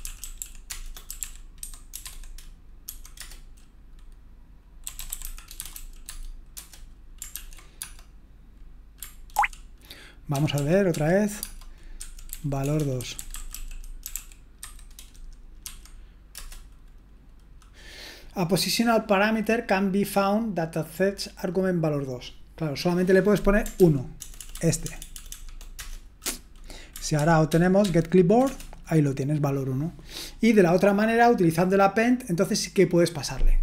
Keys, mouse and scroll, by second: 2.8 ctrl+w, 4.6-6.2 typing, 6.5 Return, 7.3 ctrl+p, 7.8 space, 9.3 ctrl+o, 12.0 ctrl+p, 23.7 ctrl+p, 24.2 ctrl+BackSpace, 24.4 ctrl+BackSpace, 25.0 BackSpace, 25.1 BackSpace, 25.4 BackSpace, 25.7 Return.